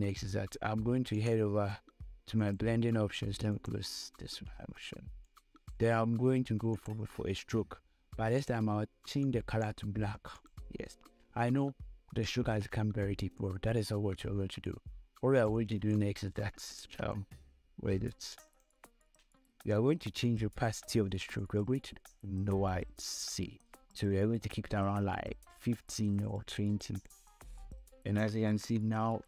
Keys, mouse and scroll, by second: 0.3 Scroll_Lock, 0.3 click, 1.4 right click, 2.7-10.7 drag, 13.0 scroll up 1, 14.9 space, 15.0 click, 15.4 space, 16.3 click, 16.8 space, 18.7 click, 21.7-29.2 drag.